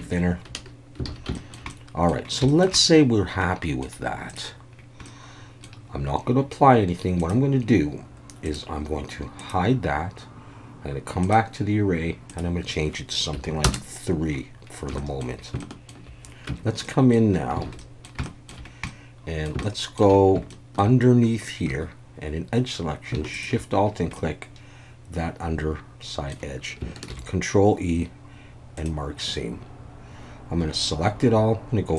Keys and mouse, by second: 0.0 Tab, 1.1 alt+a, 1.3 shift+middle drag, 1.7-2.1 middle drag, 2.5 shift+middle drag, 2.7-3.8 middle drag, 4.3 click, 5.0-5.6 middle drag, 7.2 click, 9.4 click, 11.2 click, 12.4-14.2 drag, 15.0 shift+middle click, 15.6-15.9 shift+middle drag, 16.5 Tab, 16.8 middle click, 17.6 alt+a, 17.8 middle click, 18.2 shift+middle click, 18.9 middle click, 19.6 shift+middle click, 20.5 shift+middle click, 21.7 2, 24.1-26.3 middle drag, 27.1 ctrl+e, 30.7 a.